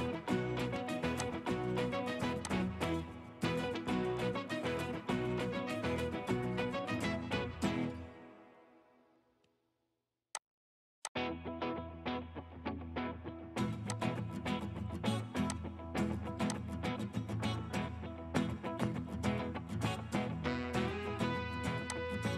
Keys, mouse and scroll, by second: 14.1 typing, 17.0 scroll down 1.